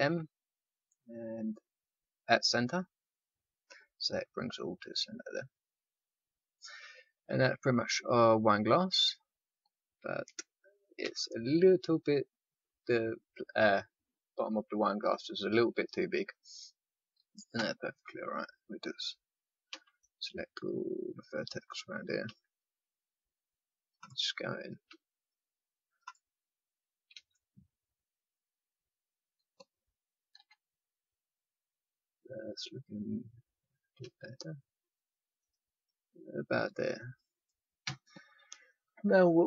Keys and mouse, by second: 11.0 a, 12.2 click, 17.5 z, 19.6 c, 21.7-24.3 right drag, 22.2 c, 24.8 c, 27.1 s, 30.3 z, 30.8 middle click, 33.9 s, 37.8 a.